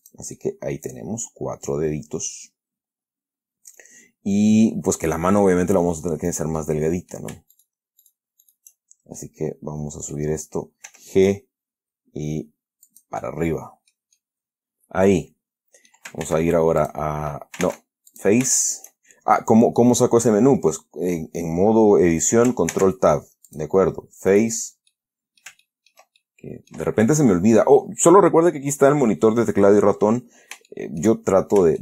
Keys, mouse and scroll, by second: 0.3 click, 0.7-5.7 middle drag, 6.6 right click, 6.9 middle click, 7.9 shift+right click, 8.3 shift+right click, 8.8 shift+right click, 9.5-10.6 middle drag, 11.2 g, 13.2 click, 13.5 middle click, 14.5-16.1 scroll down 2, 16.6 ctrl+Tab, 17.1 ctrl+click, 17.9 ctrl+Tab, 18.4 ctrl+click, 23.0 ctrl+Tab, 23.8 click, 24.6 right click, 25.2-26.4 middle drag, 26.4 ctrl+scroll up 2, 26.5 ctrl+middle click, 31.0 shift+middle click, 31.7-31.8 shift+scroll up 2.